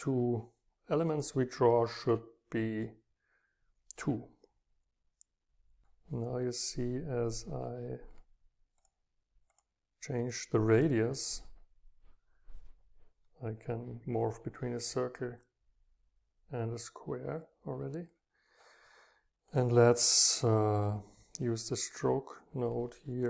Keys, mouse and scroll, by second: 0.0 click, 3.0 click, 3.1 click, 3.8 click, 4.0-7.8 drag, 8.8-10.2 drag, 11.1-13.3 drag.